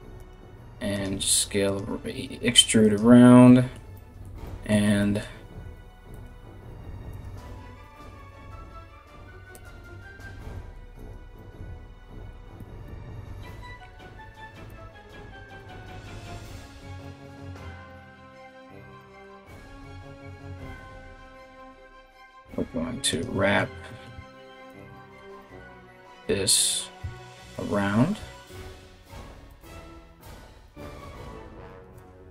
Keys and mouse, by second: 0.0 e, 0.7 e, 5.2 g, 6.2 s, 6.9 a, 7.4 s, 10.5 right click, 11.4 g, 14.6 r, 16.0 e, 18.1 right click, 19.2 e, 20.8 right click, 23.7 e, 25.3 e, 26.6 r, 27.8 g, 29.6 r, 32.0 e.